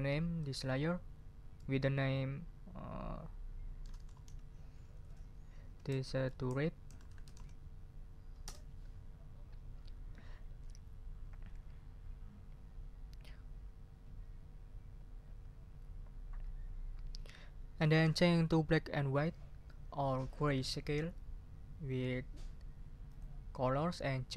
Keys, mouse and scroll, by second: 3.8-7.8 typing, 8.4 Return, 23.0 click.